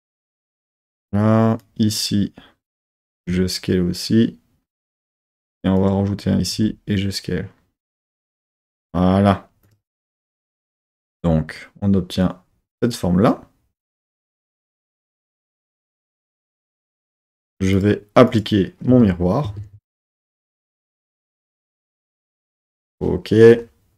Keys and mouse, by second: 0.3-3.2 drag, 3.2 s, 4.8-6.5 drag, 6.5 s, 8.2 click, 9.6 click, 10.0 Tab, 10.5 z, 13.6-15.1 middle drag, 17.7-18.9 drag, 18.9 Tab, 18.9 middle click, 19.4 Tab, 20.1 middle click, 20.8 KP_3, 21.5 KP_1, 22.4 KP_3.